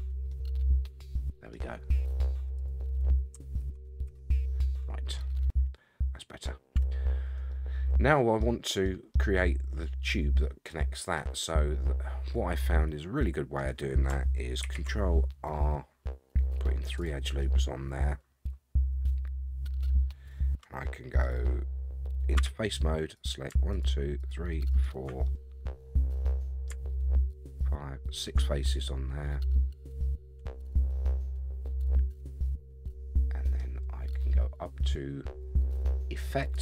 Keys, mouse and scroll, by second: 0.3-1.5 middle drag, 2.5 click, 3.6 ctrl+a, 4.1 ctrl+a, 4.7 middle click, 5.3-5.6 scroll up 3, 6.2 middle click, 6.7 Tab, 7.2 scroll down 2, 7.5 middle click, 8.8 middle click, 11.2-13.6 middle drag, 14.6 ctrl+r, 17.4-21.2 middle drag, 22.4 3, 23.1 click, 23.7 shift+click, 24.2 shift+click, 24.7 shift+click, 25.2-26.7 middle drag, 27.5 shift+click, 28.1 shift+click, 28.4-33.6 middle drag, 36.4 click.